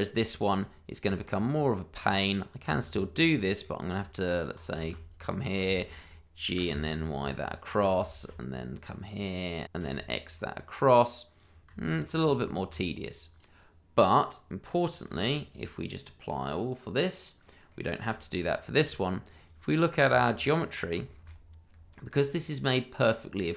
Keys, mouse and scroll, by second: 0.0 double click, 0.3 shift+middle click, 0.4 middle click, 0.4 shift+middle click, 0.7-1.0 scroll up 1, 1.0 Tab, 3.2 middle click, 4.3 Tab, 4.8 shift+z, 5.0 click, 5.6 shift+z, 6.4 g, 6.6 y, 7.7 click, 8.1 shift+z, 8.9 click, 9.6 y, 9.8 x, 11.3 click, 11.8 shift+middle click, 11.9 middle click, 12.4 Tab, 12.9-13.3 scroll down 1, 13.3 click, 15.1 h, 15.4 click, 17.7 middle click, 18.5-18.8 scroll up 1, 18.8 shift+middle click, 19.4 click, 20.1 Tab, 21.0 shift+middle click, 21.9 middle click, 22.0 shift+middle click, 22.2 scroll up 1, 23.3-23.5 scroll down 1.